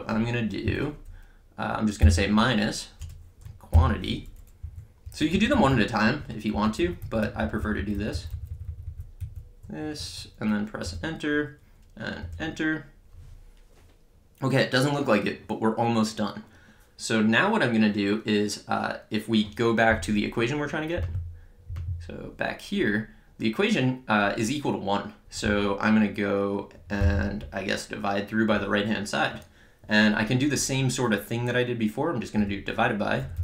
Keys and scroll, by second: 2.0 -, 3.0 Return, 3.7 (, 4.6 Up, 5.1 Right, 5.3 Left, 6.1 Right, 10.8 Return, 32.4-33.4 typing.